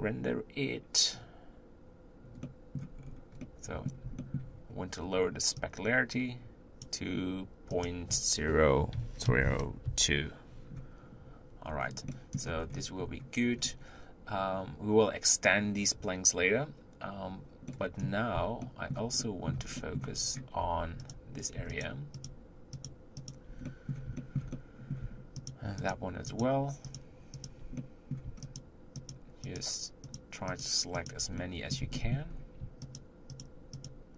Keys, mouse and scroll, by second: 1.6 z, 3.4-34.1 middle drag.